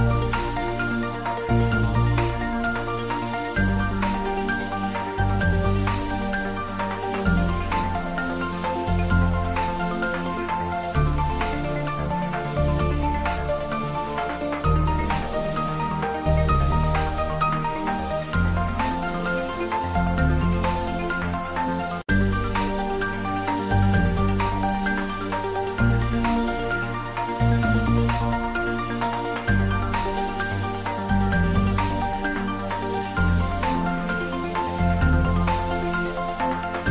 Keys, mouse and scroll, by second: 0.2 shift+middle click, 0.8 ctrl+middle click, 1.1 shift+middle click, 1.5 ctrl+middle click, 1.8 shift+middle click, 2.3 click, 2.6 ctrl+s, 2.9 click, 3.8 click, 5.8 click, 9.1 s, 10.3 click, 12.0 ctrl+middle click, 12.5 click, 13.6 ctrl+middle click, 14.1 shift+right click, 15.1 click, 16.3 shift+click, 17.1 click, 17.6 shift+click, 17.9 click, 18.4 shift+click, 20.7 ctrl+j, 21.9 ctrl+middle click, 22.5 shift+middle click, 23.1 ctrl+middle click, 23.8 shift+click, 24.3 click, 26.9 ctrl+middle click, 27.3 ctrl+s, 29.0 r, 31.1 click, 31.7 r, 33.4 click, 34.1 g, 36.4 click, 36.6 d.